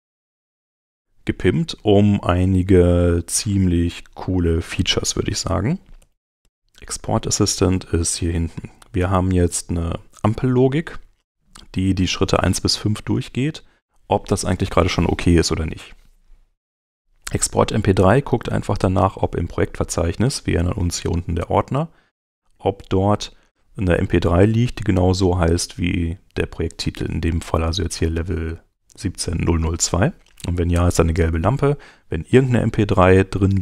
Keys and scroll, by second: 5.7 alt+x.